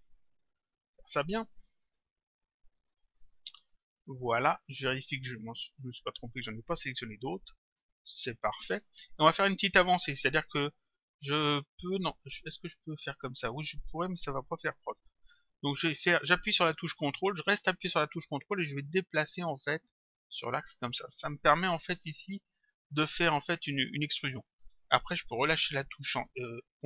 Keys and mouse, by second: 1.9 shift+click, 3.1 shift+click, 5.1 click, 8.3 click, 12.1 click, 19.9 ctrl+click.